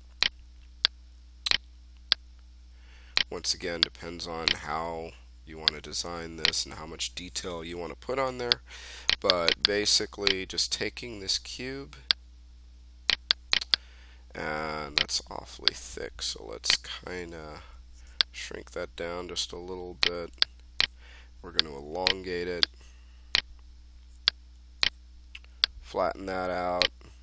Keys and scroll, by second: 4.3-5.2 typing, 6.9 f, 11.3 w, 17.1 e.